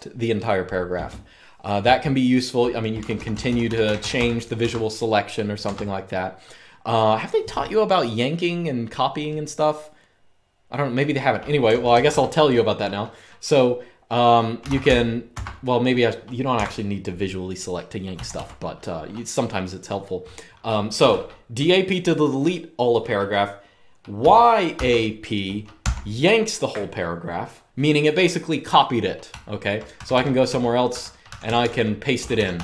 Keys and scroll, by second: 2.7-3.9 typing, 4.4 Escape, 5.5 Escape, 11.1-12.5 typing, 14.1-15.1 typing, 15.2 Escape, 16.3 Escape, 17.7-18.4 typing, 23.9-24.5 typing, 25.5 typing, 28.8-32.6 typing.